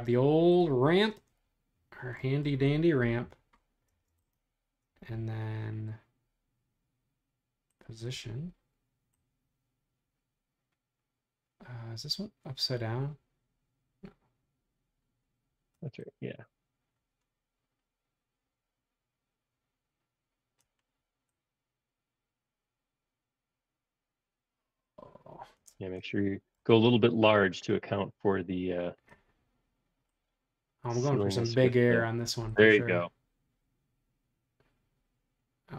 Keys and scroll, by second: 3.8 space.